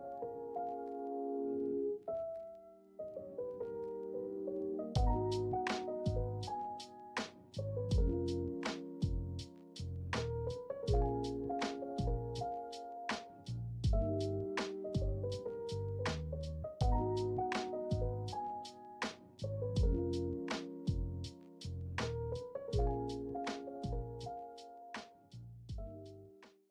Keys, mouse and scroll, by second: 0.6 shift+drag, 0.7 shift+middle click, 4.1 right click, 8.3-9.1 ctrl+middle drag, 9.8-12.1 middle drag, 13.2 Tab, 13.2 middle click, 14.3-15.3 middle drag, 16.5 ctrl+Tab, 16.8 middle drag, 17.5-17.8 middle drag, 18.1-19.1 middle drag, 19.9-22.4 drag, 22.4-25.7 middle drag, 26.1-26.7 middle drag.